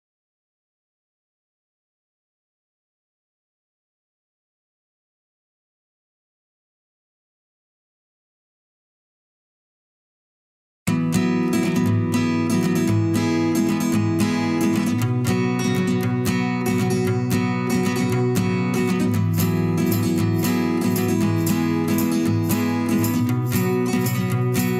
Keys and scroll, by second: 0.7 Down, 5.9 ctrl+shift+[, 5.9 ctrl+], 15.1 Up, 21.1 ctrl+z, 21.8 ctrl+shift+z, 23.3 ctrl+shift+[, 23.6 ctrl+].